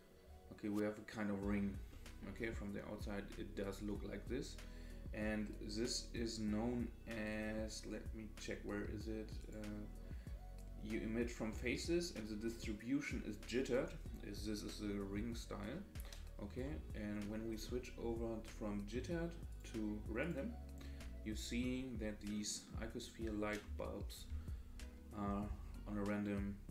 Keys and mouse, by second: 2.0-2.5 middle drag, 9.4 click, 16.5 KP_0, 19.5-20.4 drag, 22.3 middle click, 23.6 KP_0.